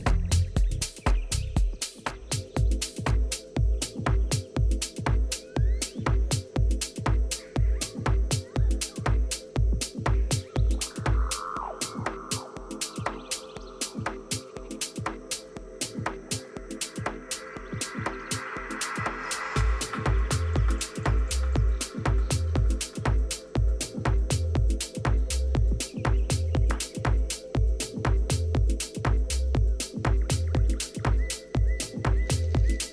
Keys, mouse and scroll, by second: 0.3 b, 2.4-4.4 drag, 4.4 a, 4.7-6.2 middle drag, 7.0 z, 17.0 KP_3, 17.8 KP_1, 19.3 ctrl+KP_1, 21.0 z, 21.8 middle click, 26.0 a, 26.1-28.3 middle drag, 26.4 a, 28.3-31.2 right drag, 31.2-32.6 middle drag.